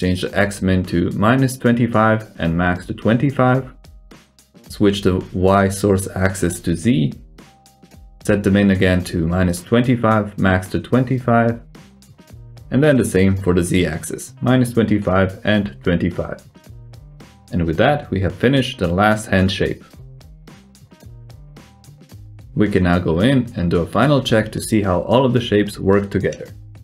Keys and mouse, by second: 1.3 click, 3.7-6.8 drag, 7.5 click, 12.2-14.8 drag, 16.0-18.9 drag, 19.7 click, 20.1 s, 21.8 middle click, 21.8-22.2 drag, 22.4 s, 25.5 alt+z, 25.8 click, 26.4 g.